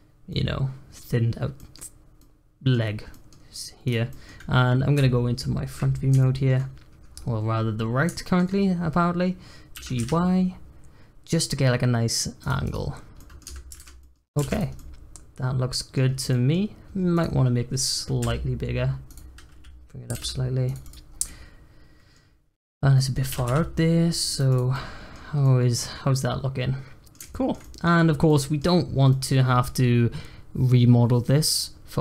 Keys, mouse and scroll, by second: 0.0 scroll up 1, 0.3-1.9 middle drag, 1.9 scroll up 1, 2.1-3.8 middle drag, 3.8 click, 4.1 middle click, 4.9 `, 6.1 shift+middle click, 6.6-7.1 scroll up 1, 7.1-7.5 scroll down 1, 7.5-8.1 scroll up 2, 8.1 shift+middle click, 8.5-9.7 scroll up 1, 9.7 g, 12.6 click, 12.9 scroll down 1, 13.1 middle click, 13.4 Tab, 13.7 alt+z, 14.0 middle click, 14.1 scroll down 1, 14.4 alt+z, 14.5 click, 14.7-16.0 middle drag, 16.0 scroll down 1, 16.3 middle click, 16.5-17.1 scroll up 5, 17.1 click, 18.1 s, 20.0 g, 20.8 click, 21.0 scroll down 1, 21.2-22.2 middle drag, 22.2-22.5 scroll up 2, 22.5 click, 22.9 middle click, 23.3 g, 24.5 click, 24.7-25.1 middle drag, 25.1 scroll down 2, 25.4-27.9 middle drag, 27.9 scroll up 1, 28.2-28.8 middle drag, 28.8 scroll up 1, 29.1-32.0 middle drag.